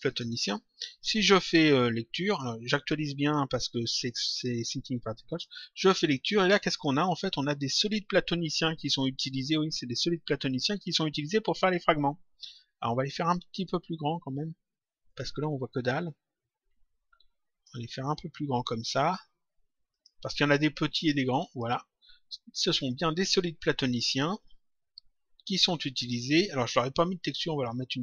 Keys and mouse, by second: 2.2 click, 5.2 click, 6.6 click, 13.1 click, 15.0 click, 18.7 click, 19.8 click, 21.4 click, 22.7 click, 27.7 click.